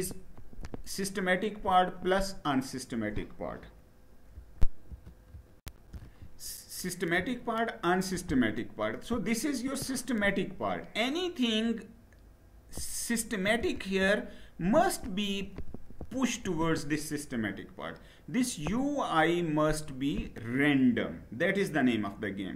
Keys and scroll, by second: 4.4 shift+F9.